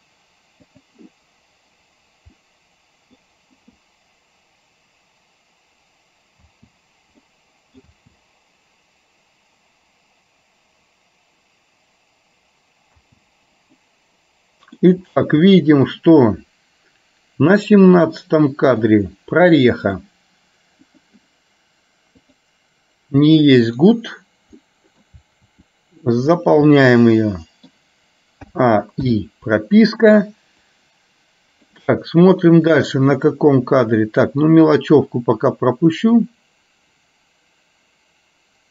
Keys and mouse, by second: 2.7 middle click, 6.6 space, 7.5 middle click, 8.1 space, 13.1 space, 14.0-15.0 middle drag, 15.6 middle click, 18.0 middle click, 19.7 middle click, 21.1 click, 24.7 middle click, 25.6 r, 26.7-27.8 middle drag, 28.7 a, 29.2 i, 31.0-32.0 drag, 33.2-34.5 middle drag, 35.7-38.7 drag.